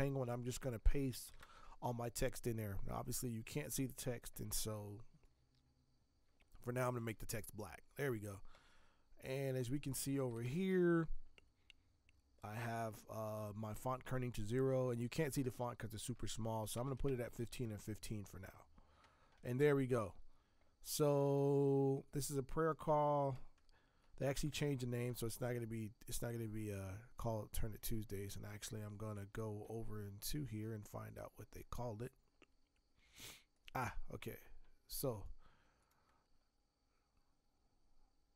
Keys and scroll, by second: 0.0 ctrl+v, 1.3 ctrl+Return, 16.7 Tab, 17.0 Tab, 24.5 ctrl+Return, 28.8 alt+Tab, 29.1 alt+Tab.